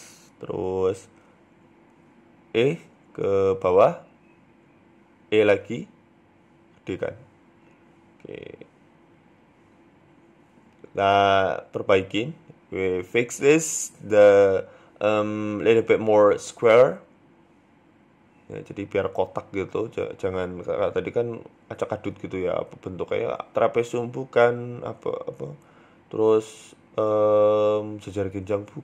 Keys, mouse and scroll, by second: 0.6 KP_7, 1.4 KP_3, 1.9 scroll up 1, 1.9-2.6 scroll down 1, 2.7 e, 3.6-3.9 scroll up 2, 4.8 e, 6.0 s, 7.4 middle click, 9.2 click, 9.5 middle click, 10.1 ctrl+KP_7, 10.5-11.0 scroll down 3, 10.7 shift+middle click, 11.0-11.3 scroll up 5, 11.3 shift+middle click, 11.9 right click, 12.7 right click, 15.1-15.7 scroll down 5, 15.3 shift+middle click, 15.7-16.4 scroll up 4, 16.4 right click, 17.6-22.3 right click, 22.3-22.8 scroll down 3, 22.8 KP_3, 23.3 scroll up 2, 24.0 scroll up 1, 24.1 middle click, 24.8 click, 26.1 shift+right click, 26.3 shift+middle click, 27.1 alt+shift+right click, 27.9 KP_1.